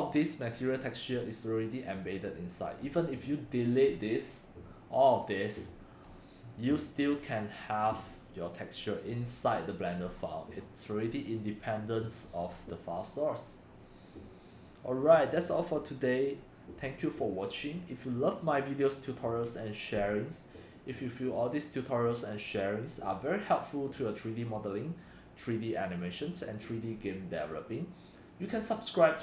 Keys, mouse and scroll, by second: 0.0-0.4 drag, 3.1 click, 6.2 click, 6.7 click, 7.5-10.0 drag, 10.0-10.6 middle drag, 12.3 click, 15.5-22.9 drag.